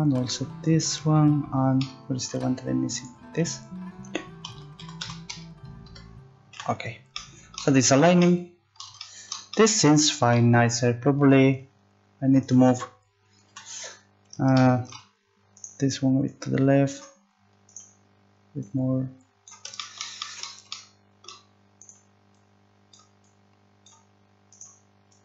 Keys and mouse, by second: 4.4 s, 6.8 z, 11.5-14.6 right drag, 13.5 z, 15.5 right click, 16.3 middle click, 16.9 click, 19.5 click, 20.0 right click, 21.8-23.1 right drag, 22.4 click, 23.9 right click.